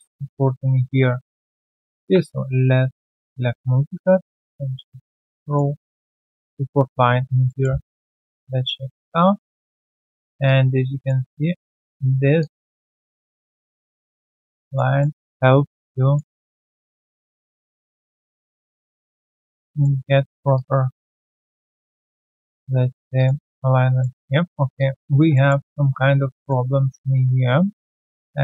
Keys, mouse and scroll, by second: 1.9 ctrl+shift+x, 5.4 ctrl+click, 6.0 alt+middle click, 7.1 alt+click, 7.4 alt+middle click, 7.6 alt+scroll down 1, 8.0 3, 8.6 right click, 9.1 q, 9.4 alt+click, 10.4 alt+click, 11.2 alt+right click, 11.6 q, 12.7 alt+right click, 12.9 alt+click, 14.3 alt+right click, 14.5 alt+click, 15.0 alt+middle click, 15.2 alt+click, 16.3 alt+middle click, 16.6 alt+click, 17.4 alt+click, 18.7 alt+click, 18.9 alt+click, 19.4 alt+middle click, 19.7 alt+click, 20.5 alt+click, 20.7 alt+right click, 21.1 alt+middle click, 21.8 alt+middle click, 21.8 alt+click, 22.5 1, 22.9 alt+right click, 23.1 alt+click, 23.4 alt+middle click, 23.6 alt+right click, 24.0 alt+middle click, 24.7 alt+click, 25.0 alt+right click, 25.3 alt+middle click, 25.6 alt+right click, 26.9 q, 27.6 alt+middle click, 28.3 scroll down 1.